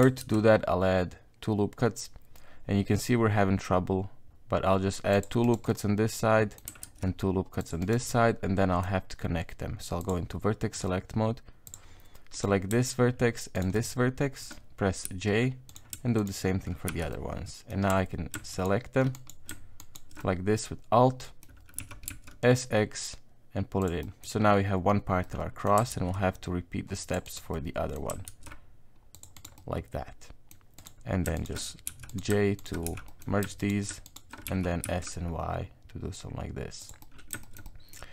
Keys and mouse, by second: 0.2 ctrl+r, 5.7 middle click, 6.8 ctrl+r, 8.1 middle click, 10.8 right click, 11.7 click, 12.3 right click, 13.6 shift+right click, 13.7 middle click, 15.1 j, 15.7 right click, 16.2 shift+right click, 16.9 j, 17.1 middle click, 18.5 alt+shift+right click, 19.1 alt+right click, 19.8 alt+shift+right click, 20.2-21.4 middle drag, 21.8 s, 24.0 middle click, 25.2 middle click, 25.9 ctrl+r, 27.5 middle click, 28.3 ctrl+r, 29.6 middle click, 30.8 right click, 31.4 shift+right click, 31.9 j, 32.1 right click, 32.6 shift+right click, 32.9 j, 33.1 middle click, 33.6 alt+right click, 34.1 alt+shift+right click, 34.4 s, 37.0 middle click, 37.7 middle click.